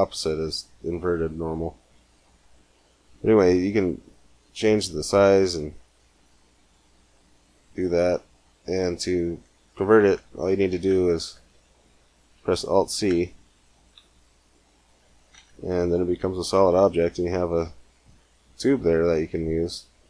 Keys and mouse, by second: 3.0-4.2 middle drag, 4.5-6.3 drag, 7.0-8.2 middle drag, 9.0-10.6 middle drag, 10.6 Tab, 13.8 alt+c, 15.2 Tab.